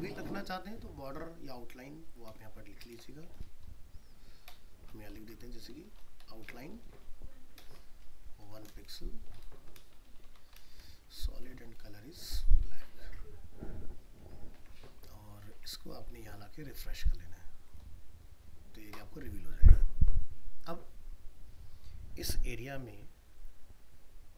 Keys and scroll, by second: 12.7 ctrl+s, 14.6 alt+Tab.